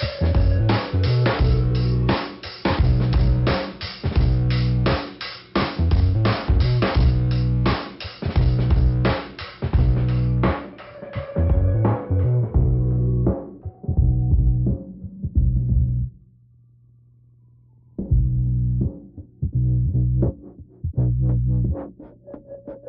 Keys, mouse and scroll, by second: 0.7 click, 1.3 click, 2.0 click, 3.2 click, 4.0 click, 4.7 click, 4.7 click, 5.9 click, 7.7 middle click, 10.2 click, 10.7 middle click, 13.4 middle click, 14.6 click, 16.5 click, 18.2 click, 19.1 click, 20.3 click, 20.4 click, 22.3 click.